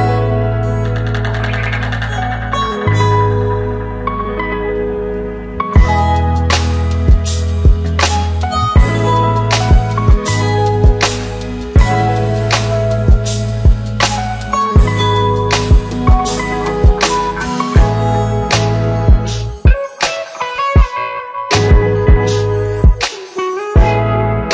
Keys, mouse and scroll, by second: 2.8 ctrl+c, 3.8 click, 5.9 ctrl+v, 7.4 click, 10.6 s, 11.8 click, 14.7-16.3 click, 18.3-24.5 click.